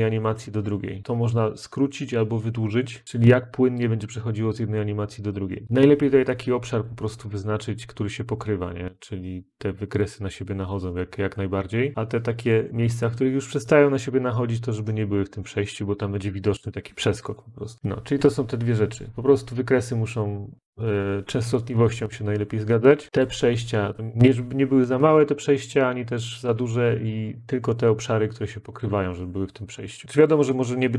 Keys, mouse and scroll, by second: 1.0 click, 3.0 click, 3.4 click, 8.0 click, 10.8 click, 17.7 click, 23.1 click, 24.0 click, 25.2 click, 30.2 click.